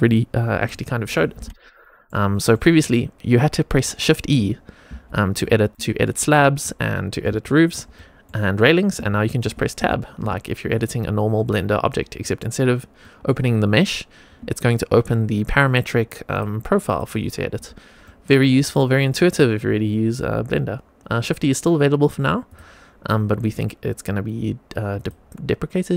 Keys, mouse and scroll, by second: 0.6 middle click, 1.7 shift+middle drag, 2.2 middle drag, 4.8 shift+e, 5.8 shift+middle click, 6.2 middle click, 7.3 shift+middle click, 7.8 middle click, 8.9 Tab, 9.3 Tab, 9.7 Tab, 10.1 Tab, 10.6 Tab, 12.1 middle click, 12.9 middle click, 13.6 middle click, 14.3 Tab, 16.2 click, 16.8 click, 17.5 Tab, 17.9 middle click, 18.4 click, 19.0 click, 19.8 middle click, 22.4 click, 23.3 Tab, 24.8 click.